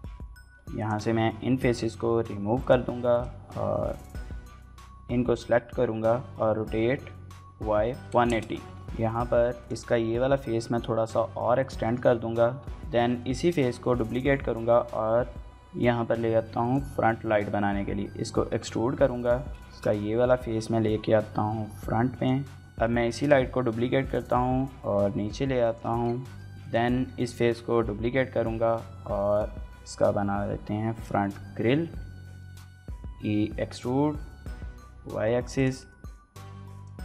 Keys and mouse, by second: 1.5 l, 2.1 x, 2.9 click, 3.9 l, 5.2 r, 7.3-9.0 typing, 7.7 KP_Enter, 8.7 shift+click, 9.8 click, 10.0 shift+middle click, 10.1 middle click, 10.5 shift+middle click, 11.0 shift+middle click, 11.3 shift+middle click, 11.7 click, 11.9 middle click, 12.2 x, 12.6 click, 12.7 shift+middle click, 13.0 shift+middle click, 13.4 shift+middle click, 14.1 shift+click, 14.2 shift+d, 14.4 z, 15.6 click, 16.8 e, 17.7 click, 18.4 KP_7, 18.7 shift+middle click, 19.0 shift+middle click, 19.1 g, 19.8 y, 20.2 click, 20.5 click, 20.9 g, 21.0 x, 21.5 click, 22.1 g, 22.2 y, 22.7 click, 22.9 shift+click, 23.2 shift+click, 24.0 shift+click, 24.1 click, 24.3 g, 24.6 shift+z, 25.5 shift+click, 25.8 shift+middle click, 25.9 middle click, 26.2 shift+middle click, 26.5 z, 27.0 click, 27.3 shift+d, 27.3 z, 28.4 shift+click, 28.6 shift+middle click, 28.8 middle click, 28.9 shift+middle click, 29.2 middle click, 29.9 shift+d, 30.1 x, 30.8 y, 31.6 shift+click, 31.7 click, 31.8 middle click, 32.0 click, 33.0 x, 34.7 y, 35.3 click, 35.7 middle click, 36.9-37.0 typing.